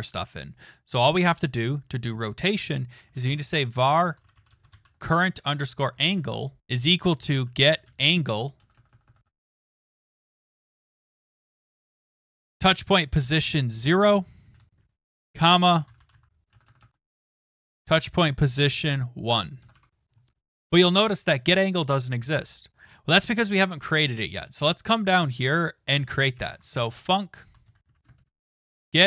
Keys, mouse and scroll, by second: 2.5 scroll, 2.8-11.0 typing, 12.3-18.0 typing, 19.6 typing, 22.8 click, 23.5 click, 23.6 click, 23.6 click, 23.7 click, 24.4 click, 25.0 click, 25.9 Return, 26.1-29.0 typing.